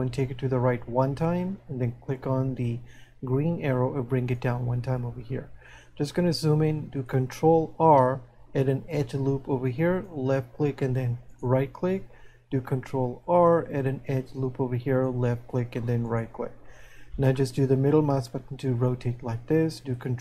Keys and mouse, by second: 3.8 click, 16.1 right click, 17.4 middle click.